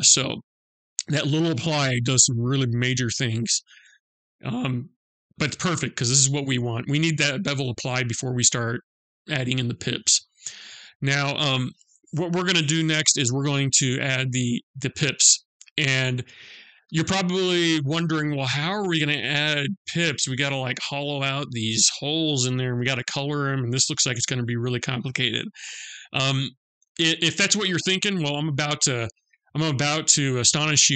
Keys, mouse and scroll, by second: 3.4-3.8 scroll up 2, 3.8-4.2 scroll down 2, 4.2-4.5 scroll up 1, 4.5 scroll down 1, 4.7 middle click, 9.7-10.4 scroll up 2, 10.4-14.1 scroll down 2.